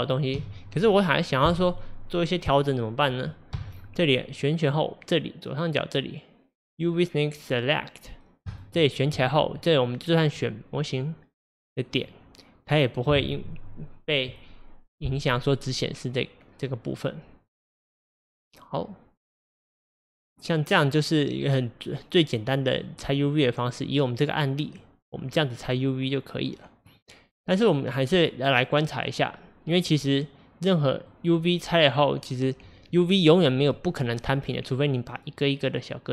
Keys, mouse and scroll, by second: 0.4 a, 1.7 click, 3.6 a, 9.2 click, 10.3 click, 10.9 click, 11.5 click, 12.0 click, 18.1 click, 22.8-26.9 middle drag, 26.9 click, 31.9 click.